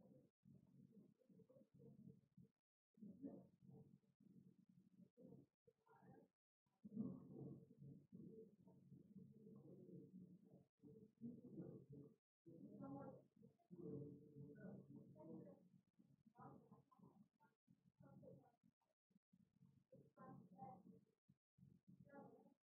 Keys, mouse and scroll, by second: 0.0 click, 1.4 right click, 2.6 click, 4.0 click, 5.2 click, 5.9 click, 7.2 click, 8.8 click, 10.8 right click, 11.9 click, 13.8 click, 14.9 click, 15.8 click, 17.1 click, 19.5 right click, 20.7 click, 21.9 click, 22.6 click.